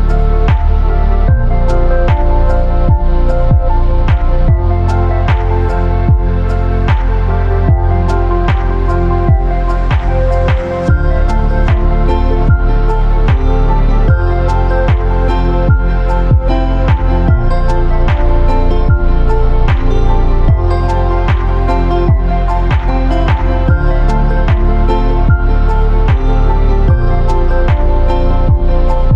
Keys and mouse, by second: 0.0 Tab, 0.3-0.9 drag, 3.6-4.3 drag, 9.6-10.3 drag, 11.1 ctrl+j, 12.3 click, 12.8 Tab, 13.4 1, 13.8-14.1 drag, 14.2 shift+drag, 14.5 drag, 17.5 f, 17.6 a, 20.0 f, 20.0 a, 21.0-21.7 drag, 22.0-23.6 drag, 24.0-25.8 ctrl+drag, 24.4 ctrl+r, 26.1 ctrl+r, 27.7 1, 28.3 click, 28.8 shift+click.